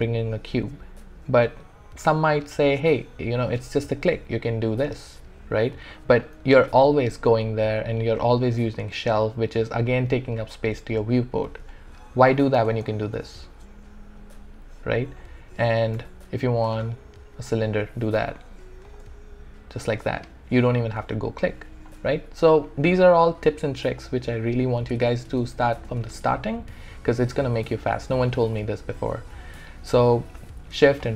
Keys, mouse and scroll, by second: 4.8 click, 11.7 alt+click, 12.7-14.9 shift+right drag, 16.7 shift+right click, 19.0 shift+right click, 27.5 shift+middle click, 28.4-31.0 alt+middle drag.